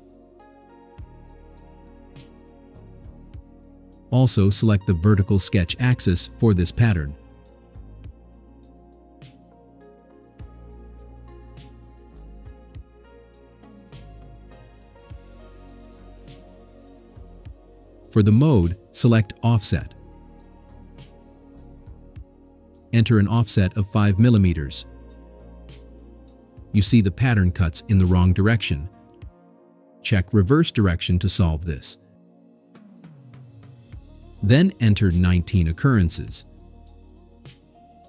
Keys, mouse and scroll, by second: 1.1 click, 4.9 click, 11.0 click, 17.9 click, 20.7 click, 22.8 click, 24.0 5, 24.3 click, 30.9 click, 34.9 click, 37.7 1.